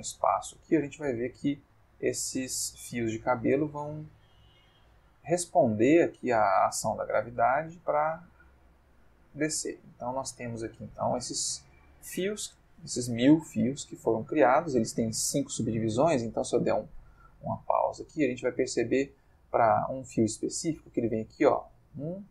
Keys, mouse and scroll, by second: 10.0-11.4 middle drag, 13.9-14.7 middle drag, 16.0 space, 17.1-17.9 ctrl+middle drag, 18.0-19.1 ctrl+shift+middle drag.